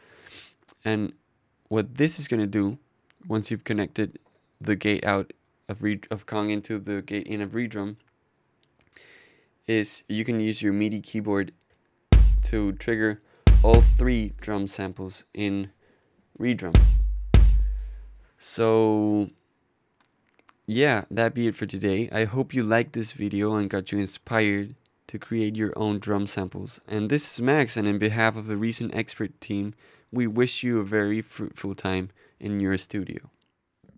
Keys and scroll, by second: 0.0 Return, 8.2 Tab.